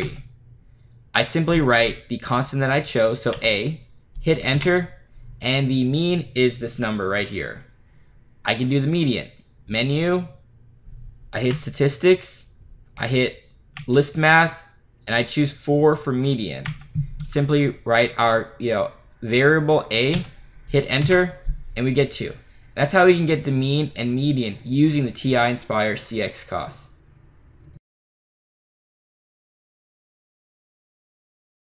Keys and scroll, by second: 3.4 a, 4.6 Return, 9.8 Menu, 11.6 6, 13.9 3, 16.8 4, 20.2 a, 21.1 Return.